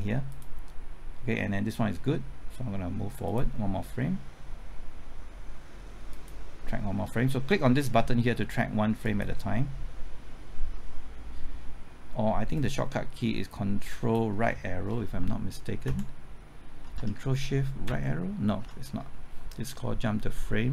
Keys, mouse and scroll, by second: 15.1 typing, 15.8 ctrl+Right, 16.9 typing, 17.8 ctrl+shift+Right.